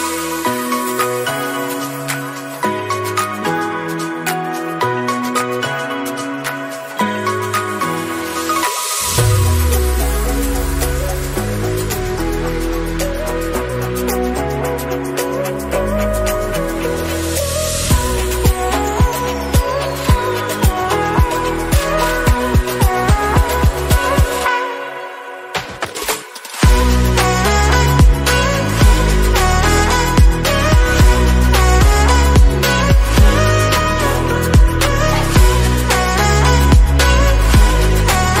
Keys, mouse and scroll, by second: 0.7-1.1 scroll down 2, 0.9 click, 1.2 KP_7, 1.8-2.2 shift+middle drag, 2.2 scroll up 2, 2.4 g, 9.3 click, 12.4-13.1 scroll down 4, 15.2-15.7 scroll up 6, 15.6 click, 16.2-18.6 drag, 18.6 shift+middle click, 19.1 click, 19.5 click, 19.9-20.2 scroll down 3, 21.5-21.9 scroll up 4, 23.5 click, 29.5 click, 30.4 middle click, 30.7-31.0 scroll up 3, 31.0-31.4 drag, 31.4 KP_Decimal, 31.7 middle click, 31.9 scroll up 3, 32.2-34.1 middle drag, 34.1 Tab, 34.9 ctrl+r, 36.4 3, 36.8 alt+click, 37.1-38.4 middle drag, 37.8-38.4 scroll down 3.